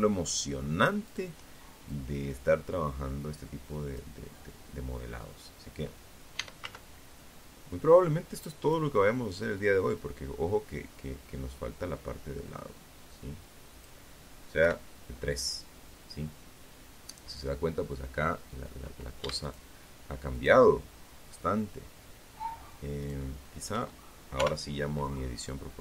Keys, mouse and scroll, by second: 0.0-2.3 drag, 2.6-3.0 scroll down 2, 4.5 e, 4.8 z, 6.8 click, 7.7-12.2 drag, 12.8 KP_3, 14.3 scroll down 2, 17.6 alt+shift+right click, 18.4 alt+shift+right click, 21.2 alt+shift+right click, 22.5 o, 23.6 click, 24.5-25.8 scroll up 6.